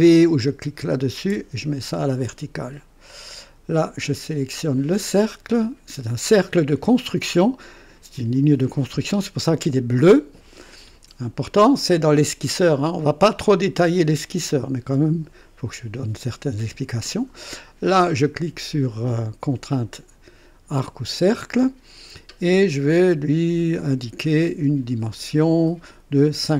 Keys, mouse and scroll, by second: 1.2 v, 3.7 click, 20.8 click, 26.4 KP_5.